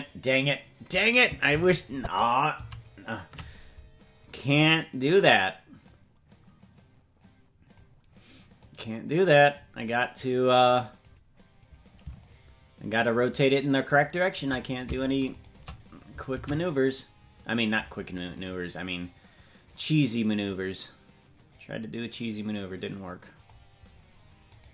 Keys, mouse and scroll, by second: 1.9 ctrl+z, 2.9 ctrl+z, 4.6 right click, 5.8-7.8 drag, 8.6-9.6 drag, 10.1 click, 12.2-14.4 shift+drag, 14.8 right click, 15.4 shift+right click, 16.4 alt+r, 18.4 right click, 20.4-23.5 drag, 24.6 right click.